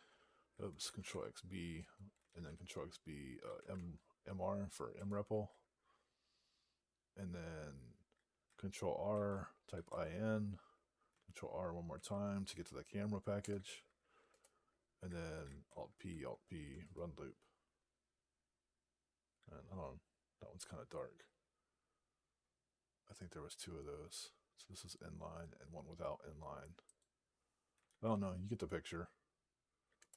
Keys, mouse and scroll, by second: 1.6 Return, 3.3 m, 3.6 Tab, 4.8 Return, 9.0 ctrl+r, 9.3-10.2 typing, 11.8 ctrl+r, 13.2 Return, 14.2 Return, 15.5 alt+p, 16.7 Return, 26.7 click, 29.9 Return.